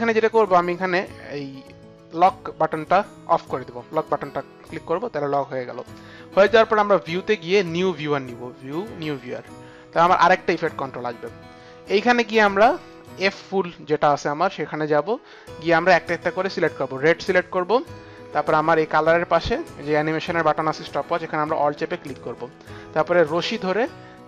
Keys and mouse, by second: 2.0 click, 6.9 click, 9.2 click, 12.9 click, 15.8 click, 18.6 click, 21.6 alt+click.